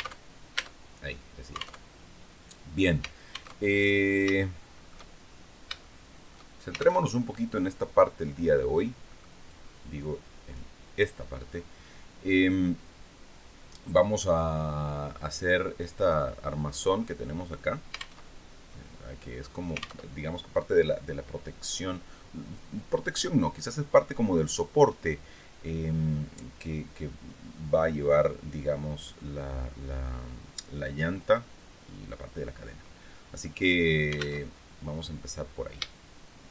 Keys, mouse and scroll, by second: 0.4-0.8 scroll down 2, 1.4 alt+Tab, 3.1 alt+Tab, 3.8 shift+middle click, 4.7-5.1 shift+scroll down 3, 5.3 shift+middle click, 6.5 alt+Tab, 8.6 click, 9.0-10.2 drag, 14.7 click, 17.7 alt+Tab, 19.5 alt+Tab, 33.9 alt+Tab, 34.4 scroll down 2.